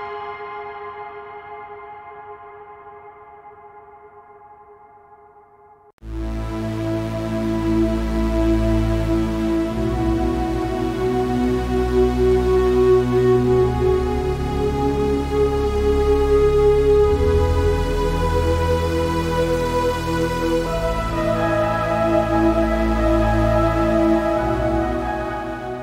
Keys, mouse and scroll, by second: 0.0-0.6 drag, 0.6 Tab, 0.8 middle click, 1.9 scroll up 2, 2.1-2.6 scroll down 1, 2.6 click, 2.7 click, 3.0 right click, 3.6 click, 3.8 shift+right click, 4.0 click, 4.5 middle click, 4.8 right click, 5.1 click, 6.2 right click, 6.3 shift+right click, 6.5 shift+right click, 6.7 click, 7.5 s, 8.1 click, 8.7 shift+right click, 8.9 shift+right click, 9.0 s, 9.4 a, 9.6 right click, 9.9 shift+right click, 10.0 s, 10.5 click, 11.3 right click, 11.5 click, 11.9 right click, 12.1 middle click, 12.8 right click, 13.1 click, 13.2 scroll down 4, 13.4 a, 13.4 middle click, 13.6 scroll up 1, 13.9 right click, 14.2 click, 14.6 right click, 14.7 right click, 14.9 shift+right click, 15.0 click, 15.3 a, 15.6 scroll up 1, 15.7 right click, 15.9 shift+right click, 16.1 click, 16.6 Tab, 16.7 scroll down 1, 16.9-17.7 middle drag, 18.0 click, 18.4 a, 18.5-19.2 middle drag, 19.2 scroll up 2, 19.3 a, 20.1 click, 20.7 scroll down 1, 20.8-21.3 middle drag, 21.3 scroll up 1, 21.4 shift+middle click, 21.5-22.2 scroll down 2, 21.7 middle click, 22.2 scroll up 1.